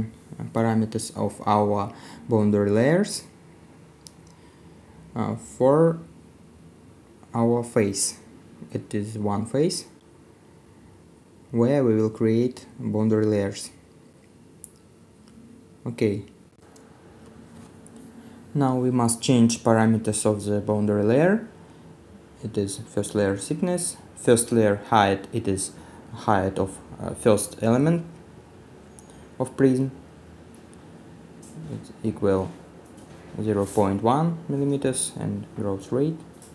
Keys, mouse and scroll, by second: 10.1 right click, 10.1 middle click, 12.9 middle click, 16.3 middle click, 35.3 middle click, 35.3 right click.